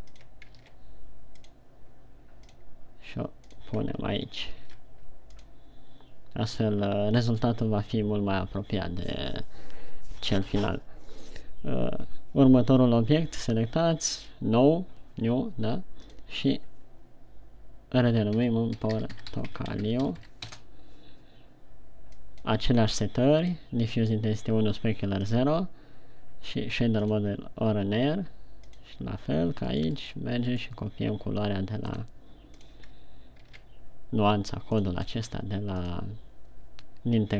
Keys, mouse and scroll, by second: 2.8 click, 7.6 right click, 14.8 click, 16.4 click, 22.7 click, 23.5 click, 25.5 click.